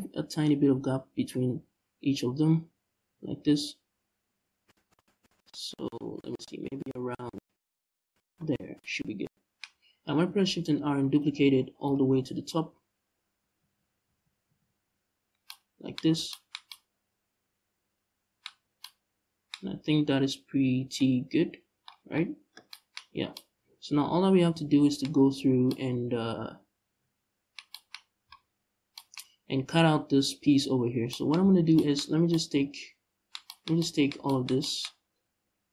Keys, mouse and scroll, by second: 7.9 shift+click, 8.2 scroll down 2, 9.9 shift+r, 11.2-12.0 scroll down 3, 12.3 shift+r, 15.6 scroll up 1, 18.2 Tab, 20.7 middle click, 22.0 middle click, 22.6-23.0 scroll up 2, 24.9 scroll down 2, 25.0 Tab, 27.6 scroll up 1, 27.9 z, 28.3-28.6 scroll down 1, 31.1 z, 34.5 scroll up 1.